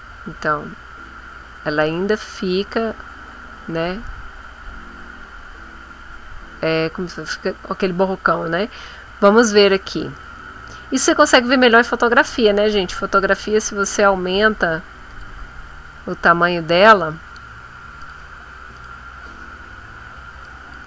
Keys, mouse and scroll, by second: 1.1 scroll up 1, 1.5-2.1 scroll down 1, 3.0 scroll down 1, 9.5 ctrl+z, 11.2 click, 15.1 click, 18.0 click, 18.8 click, 20.4 click.